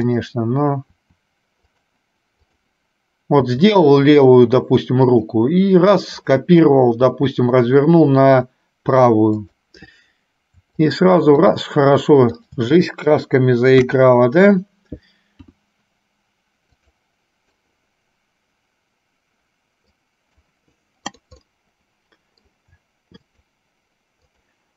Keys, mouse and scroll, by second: 0.3 click, 2.6 click, 6.4 click, 11.0 shift+click, 11.5 shift+click, 12.5 shift+click, 13.9 KP_1, 17.8-20.5 middle drag, 21.4 click, 22.0 middle click, 23.5 shift+click, 24.5 shift+click.